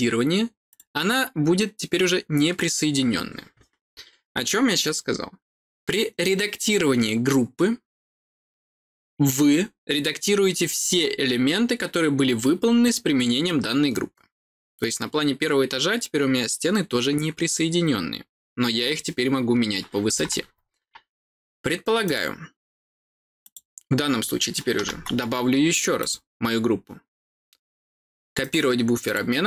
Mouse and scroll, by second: 0.6 click, 22.0 click, 23.3 click, 25.9 click, 28.3 click, 29.0 click.